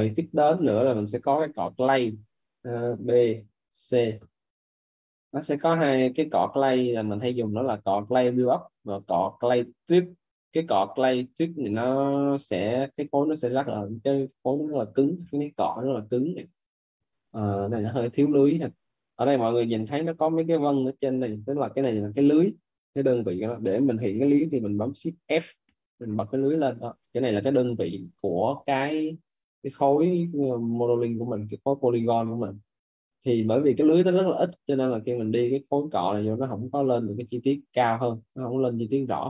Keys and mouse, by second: 3.2 b, 3.6 c, 12.0 click, 14.1 ctrl+z, 15.9 click, 17.5 z, 19.0 right click, 20.0 right click, 25.9 shift+f, 31.5 alt+right click, 34.3 alt+right click, 36.8 shift+f, 37.2 shift+f, 37.8 shift+f, 38.0 click.